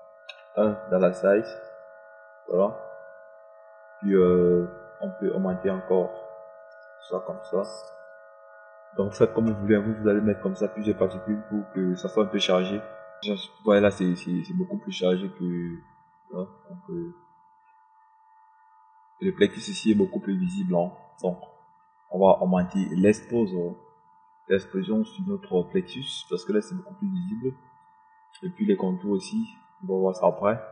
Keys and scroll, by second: 2.0 KP_1.